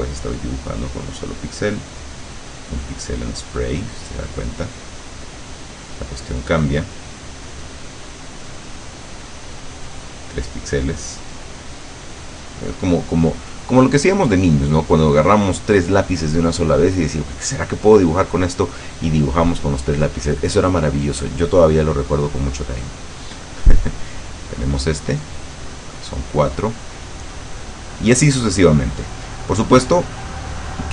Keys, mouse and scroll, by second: 0.6 click, 2.1 click, 3.0-5.2 drag, 6.5 click, 8.0 click, 8.9-10.4 drag, 11.8 click, 22.8 click, 24.3-26.1 drag, 27.4 click, 29.0 click.